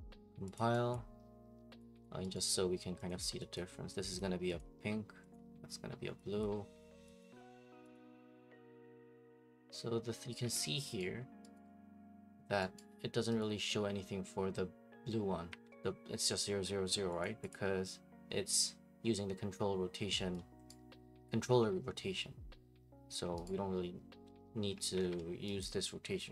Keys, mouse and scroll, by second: 0.5 click, 1.0 click, 1.8 click, 2.0 click, 2.3 right click, 2.5 middle click, 2.5 middle click, 3.1 click, 3.5 click, 4.2 click, 4.6 click, 5.3 click, 6.4 click, 7.2 click, 7.9 click, 10.4 click, 10.4 alt+Tab, 11.0 click, 11.2 click, 11.2 click, 12.8 click, 13.4 click, 15.5 alt+Tab, 17.2 click, 17.5 click, 20.7 click, 23.4 click, 25.0 alt+Tab, 25.6 click, 25.8 right click.